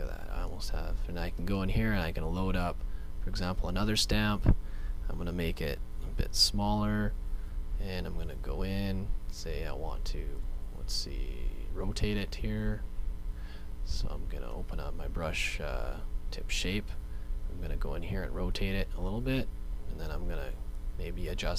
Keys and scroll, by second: 5.7 [, 5.9 [, 6.2 [.